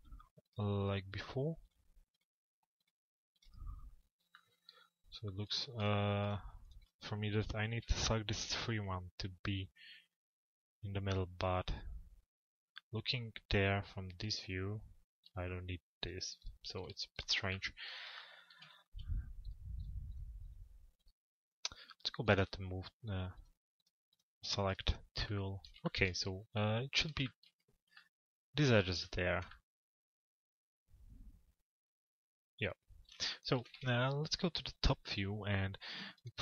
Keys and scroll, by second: 7.4 p, 33.2 z.